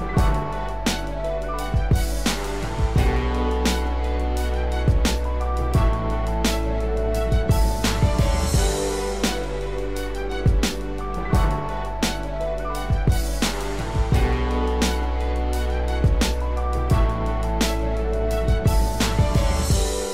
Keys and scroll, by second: 18.6 ctrl+=.